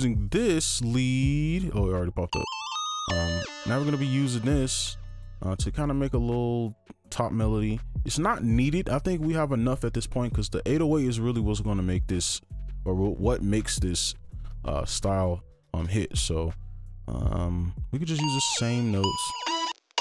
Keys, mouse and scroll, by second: 2.4 double click, 5.8 right click, 6.5 right click, 6.5 scroll up 1, 6.7 scroll down 1, 6.8 scroll up 1, 7.0-9.0 scroll down 1, 17.6-18.8 scroll up 1, 18.8 scroll, 19.0 alt+click, 19.4 space, 19.7 space, 19.9 space.